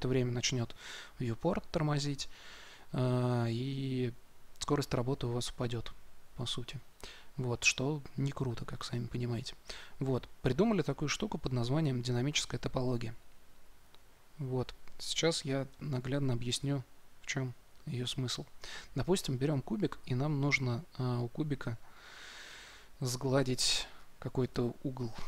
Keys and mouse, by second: 12.1-13.9 drag, 15.6 shift+c, 16.4 shift+a.